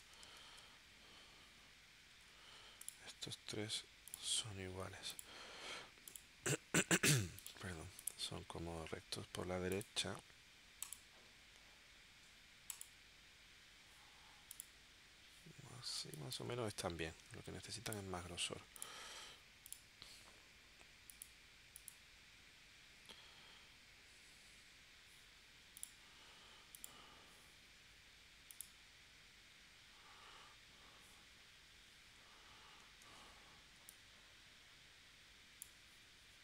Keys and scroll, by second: 0.4 super+s, 16.0 space, 33.0 shift+w.